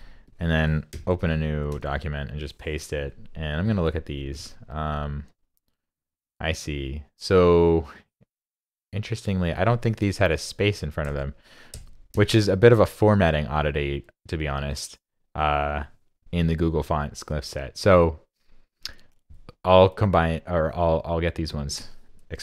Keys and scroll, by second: 0.1 super+c, 0.9 super+n, 1.7 super+v.